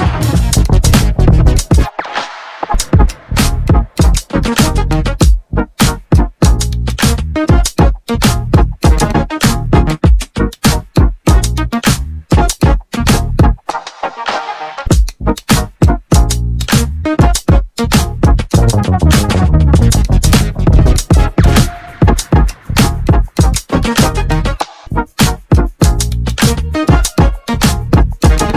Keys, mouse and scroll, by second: 10.0 shift+middle click, 10.6-11.1 scroll up 5, 11.1 shift+middle click, 11.9 click, 12.2 click, 13.5-14.7 scroll down 1, 14.7 click, 17.0 shift+click, 17.4 shift+click, 18.1 shift+Left, 19.1 g, 23.2 a, 23.8 Tab, 24.6 g.